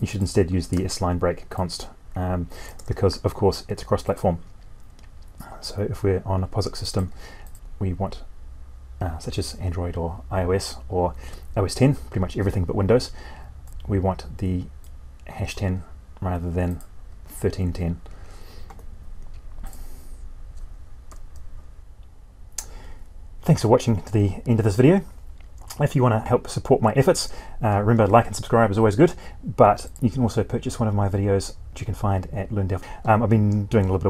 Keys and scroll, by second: 0.7 ctrl+c, 4.3 ctrl+v, 21.0 F12.